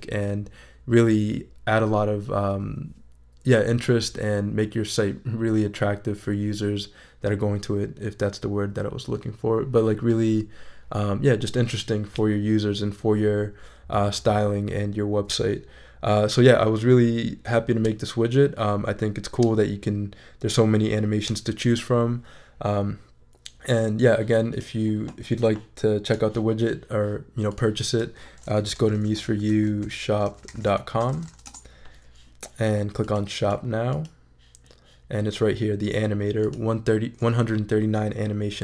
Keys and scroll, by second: 28.4-31.8 typing.